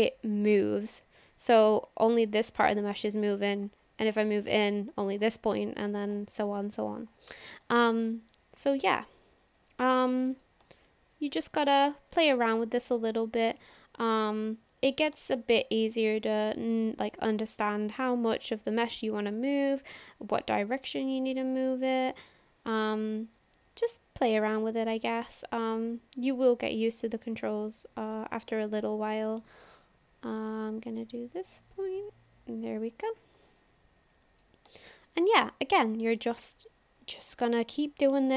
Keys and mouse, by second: 8.6 ctrl+z, 9.5 click, 10.1 middle click, 10.8 shift+middle click, 12.0 click, 13.2 middle click, 14.2 click, 15.4 shift+click, 17.9 click, 19.2 click, 20.3 click, 22.5 click, 22.7 click, 24.0-25.0 drag, 26.2 click, 26.9 click, 27.6 click, 28.5 click, 30.2 click, 31.4-32.6 drag, 33.6 middle click, 34.8 shift+middle click, 35.5 middle click, 35.7 click, 37.5-38.3 drag.